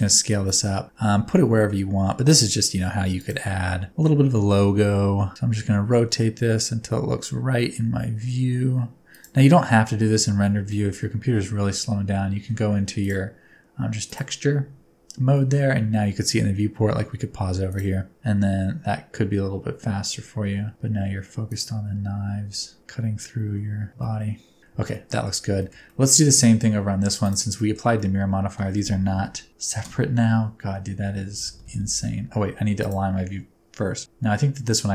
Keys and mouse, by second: 1.4 shift+middle click, 3.0 s, 3.2 click, 4.4 shift+middle click, 4.7 r, 10.7 shift+middle click, 13.0-14.6 middle drag, 15.3 shift+middle click, 17.6 middle click, 18.1 g, 21.4 shift+click, 22.5 s, 23.9 middle click, 24.8 middle click, 25.5 shift+middle click, 25.8 middle click, 27.5 shift+middle click, 27.9 middle click, 29.1 ctrl+KP_Add.